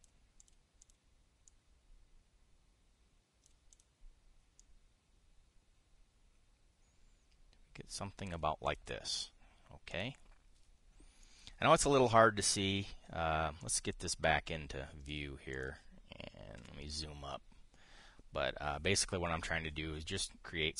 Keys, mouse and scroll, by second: 1.1 click, 1.5 click, 2.2-4.3 drag, 5.3-9.1 drag, 9.4 click, 10.6 click, 11.9-15.9 drag, 15.9 middle click, 16.2 click, 17.3 KP_5.